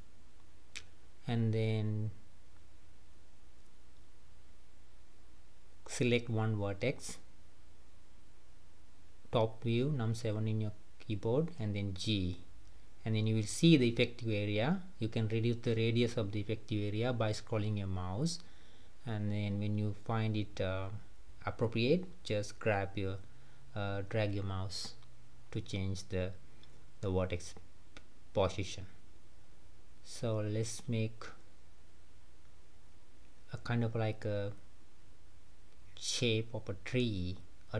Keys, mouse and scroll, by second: 0.4-3.8 typing, 5.9 click, 7.8 KP_7, 8.8-9.4 scroll down 1, 9.9 g, 26.1 click, 27.4 g, 30.2 click, 31.4 click, 32.5 click, 33.6 g, 36.7 click, 37.4 g.